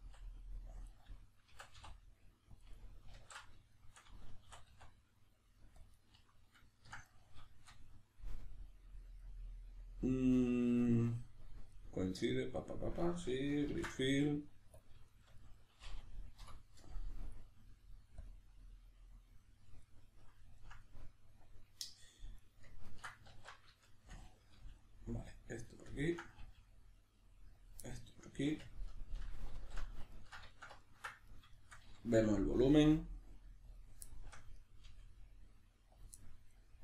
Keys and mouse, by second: 0.0 s, 0.9 click, 1.5 s, 2.7 click, 2.7-22.4 middle drag, 3.1 alt+o, 4.5 e, 5.9 click, 13.7 ctrl+f, 16.4 F9, 22.4 right click, 22.8 ctrl+right click, 23.3 alt+q, 23.8 shift+middle click, 24.6 g, 25.4 click, 25.6 right click, 26.0 ctrl+right click, 26.4 g, 27.6 click, 27.8-31.2 middle drag, 29.6 alt+o, 31.2 right click, 31.5 shift+right click, 32.3 g, 33.8 click, 34.1 shift+middle click, 34.6 right click, 34.9 g, 36.0 click, 36.2 middle click.